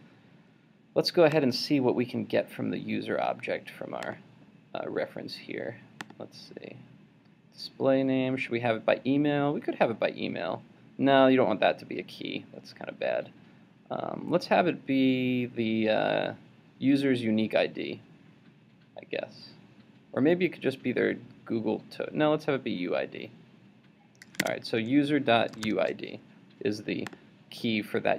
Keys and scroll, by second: 24.4 super+Tab.